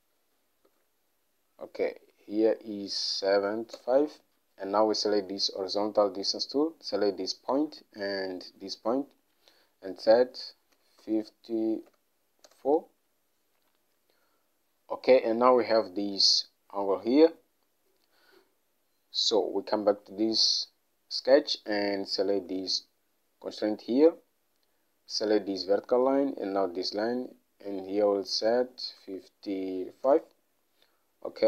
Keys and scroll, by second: 0.8 Escape, 3.4 typing, 3.9 Return, 10.9-12.0 typing, 12.6 Return, 29.1 typing, 30.2 Return.